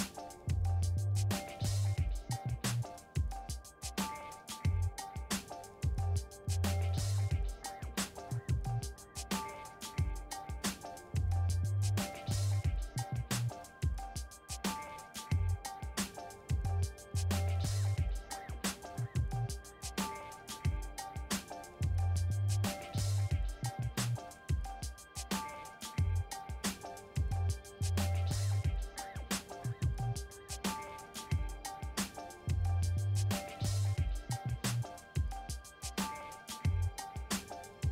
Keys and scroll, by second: 3.0 ctrl+w, 5.5 ctrl+t, 8.7 Return, 23.0 1, 26.8 1, 27.1 0, 27.7 Return, 33.8-35.3 typing, 36.8-37.9 typing.